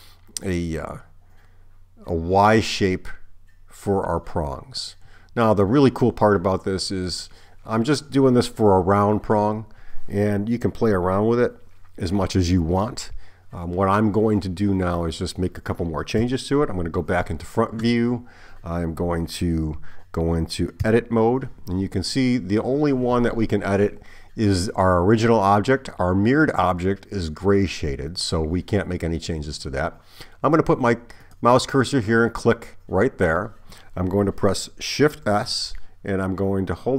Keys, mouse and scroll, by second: 16.2 KP_1, 20.9 Tab, 31.3 click, 35.4 shift+s.